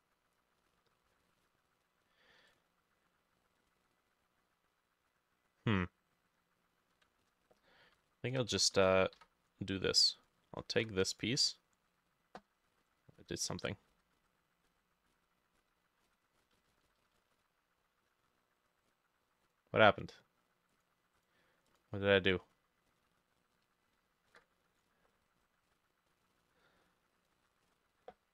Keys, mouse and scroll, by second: 7.2 ctrl+shift+a, 7.9 ctrl+y, 8.5 Escape, 9.2 Escape, 10.7 ctrl+t, 12.4 Escape, 12.7-18.4 ctrl+middle drag, 12.8 ctrl+z, 13.2 ctrl+z, 13.6 ctrl+z, 13.9 ctrl+z, 14.2 ctrl+z, 14.7 ctrl+z, 15.2 ctrl+z, 15.6 ctrl+z, 16.4 ctrl+shift+z, 16.4-20.1 drag, 16.6 ctrl+shift+z, 16.7 ctrl+shift+z, 16.9 ctrl+shift+z, 17.0 ctrl+shift+z, 17.2 ctrl+shift+z, 17.4 ctrl+shift+z, 21.2-24.7 drag, 22.1-22.5 scroll down 3, 22.5-22.9 scroll up 3, 22.9-24.0 scroll down 1, 24.0 ctrl+middle click, 24.3 ctrl+j, 25.5 alt+click, 27.7-28.3 scroll up 5.